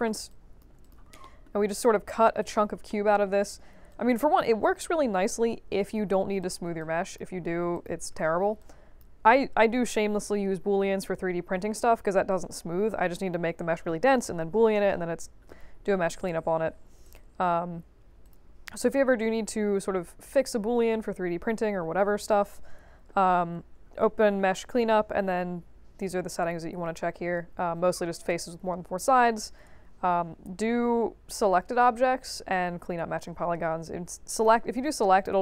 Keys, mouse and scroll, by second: 0.2 click, 0.8 click, 1.1-1.8 scroll up 4, 1.2 middle click, 1.8 click, 2.4 click, 2.8 alt+middle click, 3.9 alt+click, 5.3 3, 6.4 click, 6.7 alt+click, 7.7 click, 8.1 1, 8.5 alt+click, 17.0 click, 18.2 click, 34.3 click, 35.1 click.